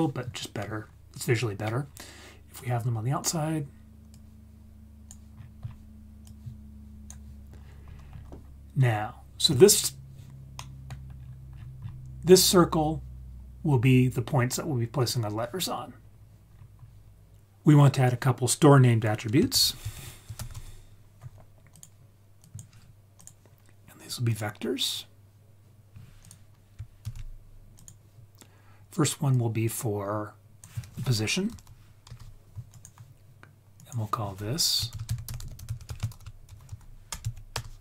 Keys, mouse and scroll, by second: 2.5-3.2 drag, 4.1-5.1 drag, 5.3-6.2 scroll down 4, 6.2-7.1 drag, 7.5-8.7 scroll up 8, 9.6 scroll down 2, 10.5-10.8 middle drag, 11.1-11.5 scroll up 1, 11.5 scroll down 1, 11.6 scroll down 1, 12.7-13.0 scroll down 2, 15.9-16.5 scroll down 4, 16.5-17.4 scroll up 3, 19.5 shift+a, 23.1-24.3 drag, 26.2 click, 27.0 shift+d, 27.7 click, 29.3-32.0 drag, 32.7 click, 33.7 click, 35.4 t.